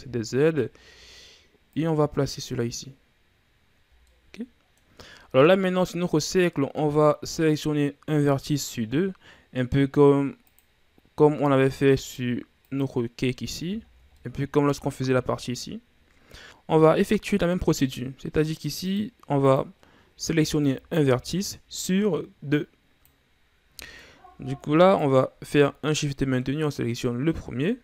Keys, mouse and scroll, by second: 0.2-1.7 shift+scroll up 7, 1.7-3.8 drag, 3.8 ctrl+z, 4.0-5.1 middle drag, 5.1-5.6 scroll up 4, 5.6-8.6 middle drag, 10.4-12.1 drag, 12.6 click, 13.5-14.1 scroll down 5, 14.1 middle click, 14.9-15.6 shift+scroll down 2, 16.4 click, 18.8-20.4 drag, 20.4-20.9 shift+scroll up 4, 20.9-23.3 middle drag, 24.3-25.2 scroll up 3, 25.2 right click, 25.8-27.8 middle drag.